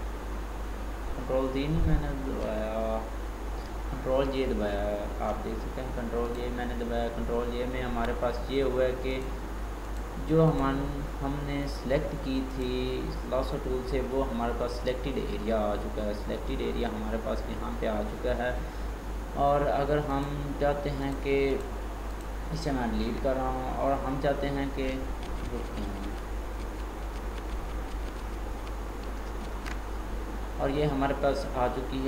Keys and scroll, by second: 25.3 ctrl+z, 29.5 ctrl+shift+z.